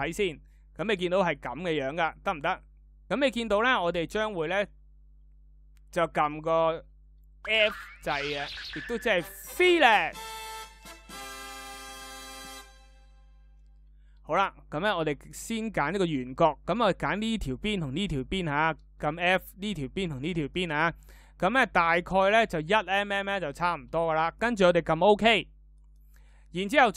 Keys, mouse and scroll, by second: 6.9 f.